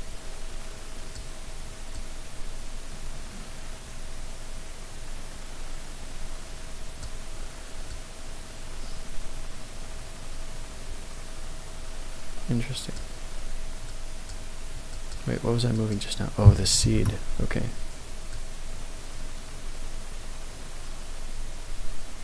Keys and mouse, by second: 2.0-7.1 drag, 7.9-13.0 drag, 14.0-15.1 drag, 15.8-17.4 drag, 18.3-22.2 drag.